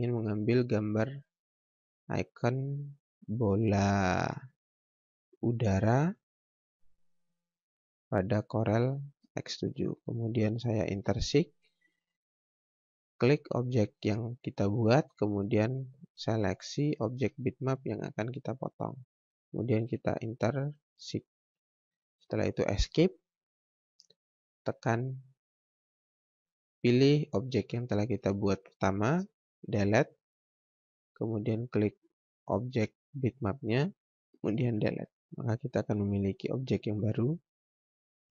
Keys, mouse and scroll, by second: 0.2 click, 1.5 scroll down 1, 1.8 scroll up 1, 2.5 scroll down 1, 3.8 click, 9.0 space, 9.4 scroll down 1, 10.0-10.8 scroll up 1, 12.8 click, 14.6 ctrl+z, 16.6 shift+click, 20.6 click, 23.3 Escape, 24.6 click, 29.6 Delete, 31.0 click, 34.7 Delete, 35.8 click, 36.8 scroll down 1, 38.1-38.3 scroll up 1.